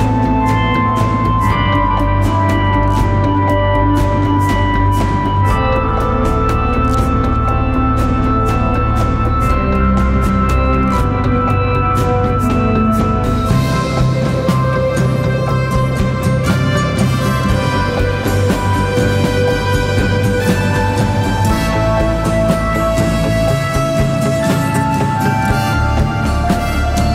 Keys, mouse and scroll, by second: 11.2 double click, 14.6 ctrl+z, 15.7 right click, 24.2 ctrl+t.